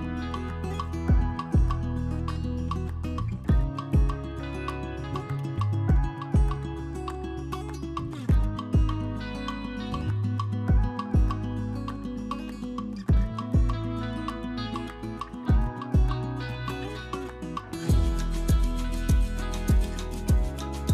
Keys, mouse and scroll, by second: 0.4 z, 0.9 Tab, 1.7 1, 2.4-3.6 drag, 3.7 g, 5.8-6.4 drag, 6.7 g, 8.1 z, 8.5 Tab, 8.7 click, 8.9-9.8 middle drag, 10.3 Tab, 10.6 2, 12.2 shift+d, 12.9 p, 13.4 Tab, 13.8 click, 14.3 Tab, 14.5 a, 14.7 drag, 15.0 e, 17.0 a, 17.4 shift+n, 17.8 Tab, 18.4 click, 19.1 middle click, 19.4 shift+middle click, 20.3 middle drag.